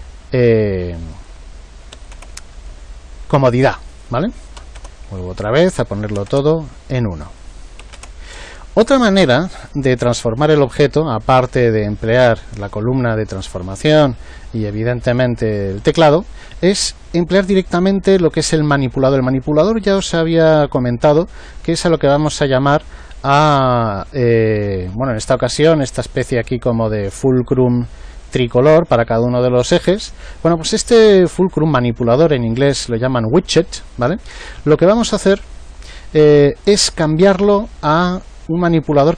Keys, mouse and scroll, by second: 1.1 click, 3.9-8.9 drag, 21.9-25.0 middle drag.